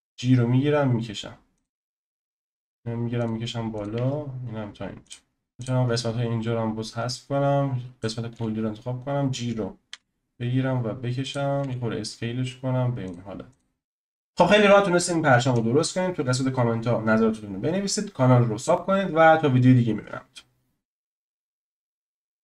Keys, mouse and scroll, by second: 2.3 click, 2.5 g, 3.8 click, 4.0 g, 5.3 scroll down 1, 5.5 click, 5.6 x, 5.9-8.0 scroll up 3, 8.0 click, 8.3 f, 9.9 g, 11.6 s, 13.6 click.